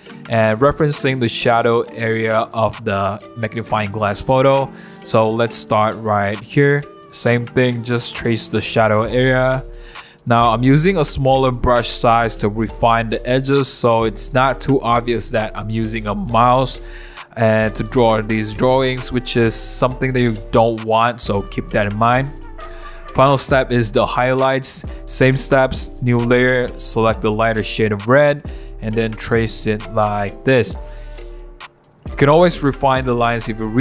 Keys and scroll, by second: 6.3 [, 6.6 [, 7.0 [, 7.2 [, 7.9 super+z, 16.9 [, 18.2 [, 21.4-24.3 typing, 25.6-27.5 typing, 28.6 b, 30.4-33.5 typing, 32.7 super+z, 33.7 super+z.